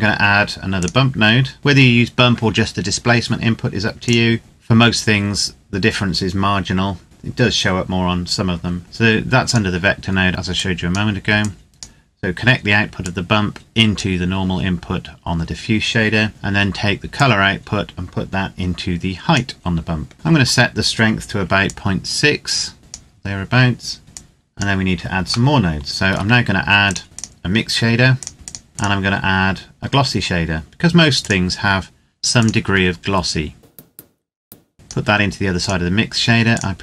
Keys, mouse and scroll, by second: 3.8 click, 9.3 click, 17.0 click, 20.1-21.2 scroll up 1, 21.4 click, 25.3 shift+middle click, 26.7 click, 31.0 click, 32.7-33.8 scroll down 1, 33.8 click.